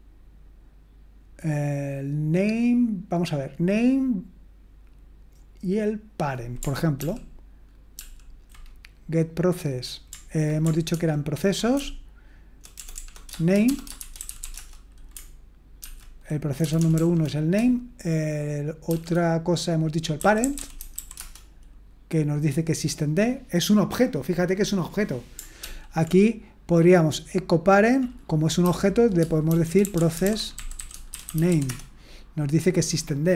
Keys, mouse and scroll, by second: 7.0 ctrl+p, 7.9 ctrl+p, 10.9 ctrl+p, 11.8-14.9 typing, 15.8 ctrl+p, 16.6 BackSpace, 16.8 BackSpace, 16.9 BackSpace, 17.1 BackSpace, 18.9 shift+p, 19.9-21.4 typing, 25.6 ctrl+p, 29.2-32.0 typing.